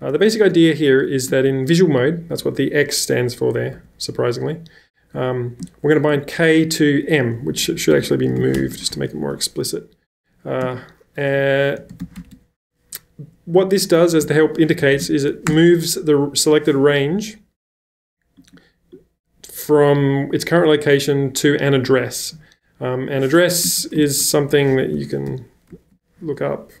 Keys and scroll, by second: 0.0-1.1 typing, 3.7 w, 6.2 w, 7.4-9.4 typing, 10.6-12.5 typing, 14.1-16.4 typing, 23.4-26.8 typing, 25.8 ctrl+].